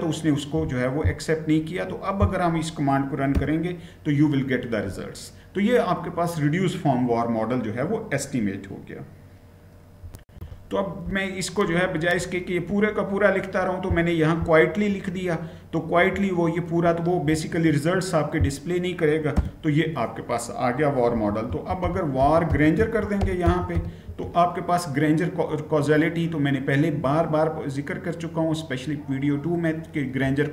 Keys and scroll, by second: 3.1 Return, 9.9 ctrl+v, 9.9 shift+F9, 19.1 Return, 20.7-24.0 typing.